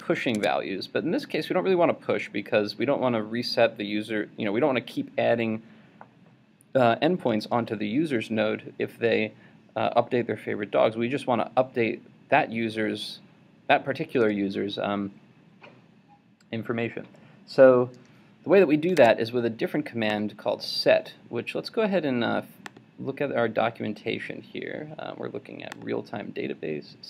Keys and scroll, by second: 19.0 super+Tab.